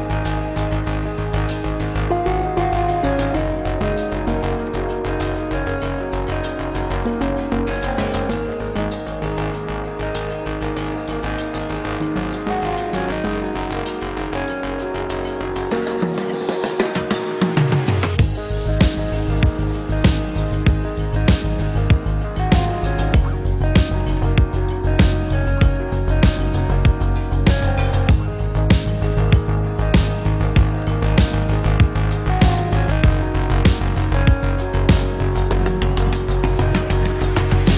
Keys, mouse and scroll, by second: 7.3 ctrl+d, 15.7 -, 25.9 ctrl+g.